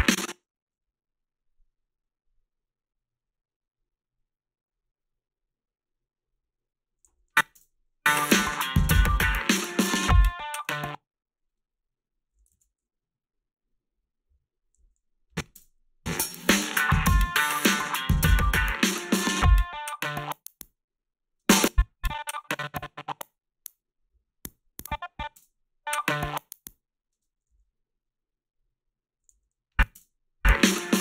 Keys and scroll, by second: 0.7 s, 7.1 a, 7.6 space, 10.7 space, 14.8 a, 15.5 space, 21.4 space, 25.4 space, 27.2 space, 27.5 s, 29.3 a, 30.0 space.